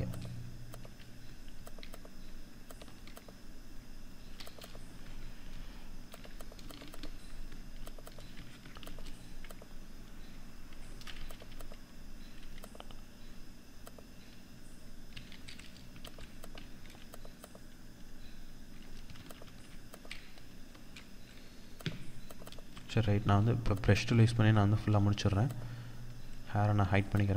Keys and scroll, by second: 10.9 Escape, 13.5 Escape, 14.5 F2, 16.9 ctrl+-, 18.6 ctrl+z, 20.2 F2.